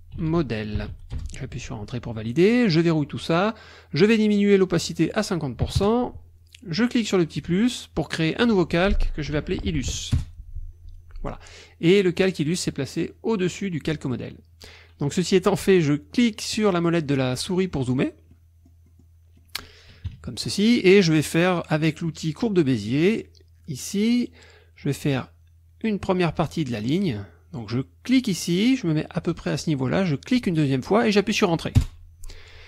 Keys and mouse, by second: 0.0-1.4 typing, 2.7 click, 4.9 click, 5.7 KP_5, 5.8 KP_Enter, 7.2 click, 9.0-10.4 typing, 12.2 click, 16.2 click, 16.6 click, 17.0 click, 18.3 click, 19.4 click, 20.1 KP_Subtract, 22.8 click, 28.1 click, 30.3 click, 31.8 Return.